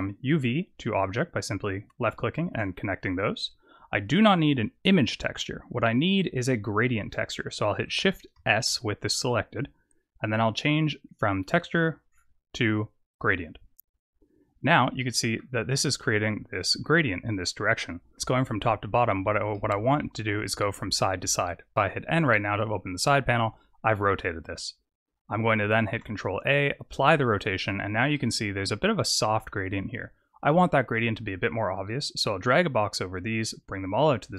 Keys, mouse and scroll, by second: 0.9 click, 7.8 click, 8.4 shift+s, 14.9 middle click, 19.4 middle click, 21.7 n, 25.9 ctrl+a, 28.0 middle click, 28.7-29.3 scroll up 1, 29.3-30.8 scroll up 4, 30.8 click, 32.9 click, 34.0 click.